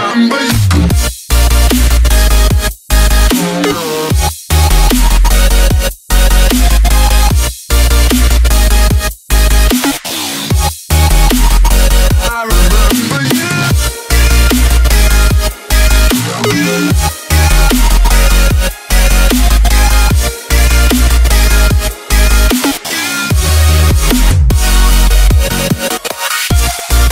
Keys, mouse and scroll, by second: 0.6 right click, 1.3 click, 1.9-3.7 typing, 4.1 right click, 4.3 F10, 4.5 right click, 5.4 click, 7.9-10.0 typing, 10.7 click, 12.9 right click, 14.0 click, 14.5-17.2 typing, 17.6-19.3 drag, 19.3 Tab, 19.3 F10, 19.6 right click, 20.3-21.4 drag, 21.0-22.4 typing, 23.2-24.4 drag, 23.9-26.9 typing.